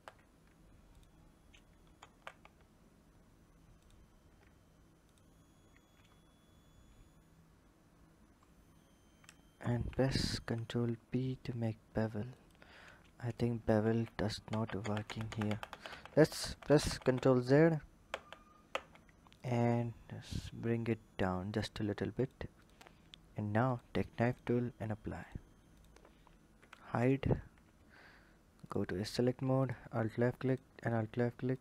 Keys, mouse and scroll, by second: 0.7 ctrl+click, 1.8 ctrl+z, 3.5 shift+click, 4.8 ctrl+click, 5.9-6.4 scroll up 1, 6.4-6.9 scroll up 4, 6.9-7.8 scroll down 1, 7.8-8.2 scroll down 4, 9.4 ctrl+b, 13.6 ctrl+z, 14.6-15.2 ctrl+z, 15.4 ctrl+z, 15.6 ctrl+z, 15.8 ctrl+z, 17.8 ctrl+z, 18.4 ctrl+z, 19.1 click, 20.3 click, 22.4 click, 23.4 click, 24.9-25.6 drag, 26.3 h, 26.7 click, 27.1 Tab, 28.4 click, 29.4 alt+click, 30.2 alt+shift+click, 31.3 shift+click.